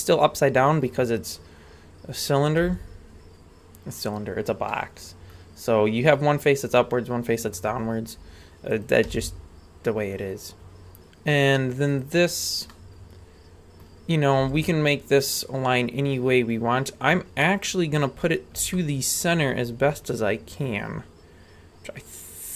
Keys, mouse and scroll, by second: 2.6 g, 4.6 middle click, 6.7-7.6 middle drag, 7.9-8.7 scroll down 3, 8.7 right click, 9.1 g, 12.3 scroll down 2, 12.7-13.8 middle drag, 14.4 g, 18.0-18.7 scroll up 5, 18.7 shift+middle click.